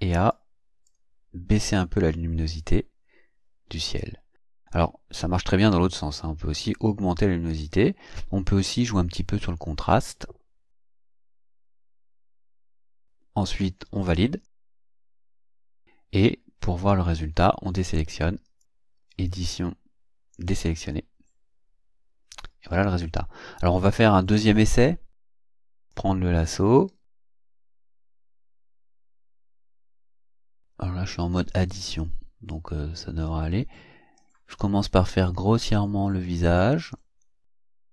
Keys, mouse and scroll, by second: 0.3-1.0 drag, 1.6-6.1 drag, 8.6 click, 11.8 click, 14.4 click, 15.7-16.5 ctrl+scroll down 4, 18.6 click, 19.1 click, 20.3 click, 22.6 ctrl+scroll down 2, 25.3 click, 25.9 click, 26.8-27.7 ctrl+scroll up 4, 27.8 ctrl+scroll up 3, 32.5-34.4 drag, 34.8-37.9 drag.